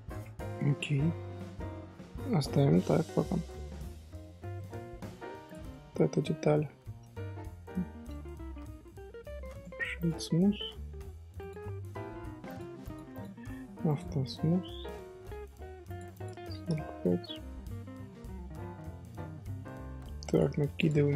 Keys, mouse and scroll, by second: 0.4 Tab, 0.6-1.0 scroll down 2, 1.0 middle click, 1.6 Tab, 2.2-4.2 middle drag, 4.2 alt+h, 4.5-4.9 middle drag, 4.9-5.4 scroll up 1, 5.4 click, 5.8-9.1 shift+middle drag, 9.1 shift+h, 9.5 right click, 10.3-11.3 scroll up 2, 11.3 scroll up 1, 11.3 click, 12.4 click, 12.8 click, 13.1 click, 13.8 click, 14.2-15.8 middle drag, 15.8 click, 16.1 click, 17.0-20.1 middle drag, 20.2 click.